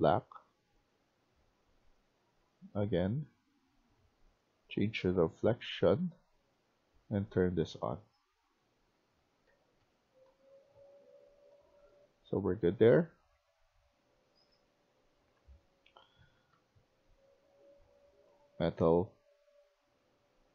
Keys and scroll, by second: 7.6-16.9 typing.